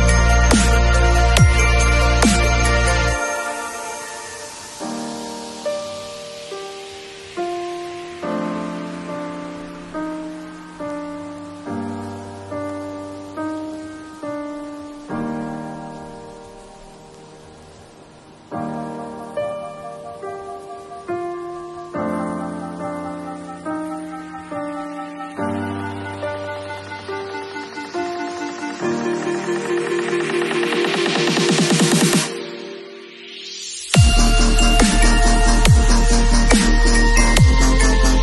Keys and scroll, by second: 10.8 b, 12.1 ], 13.7 ], 18.9 v.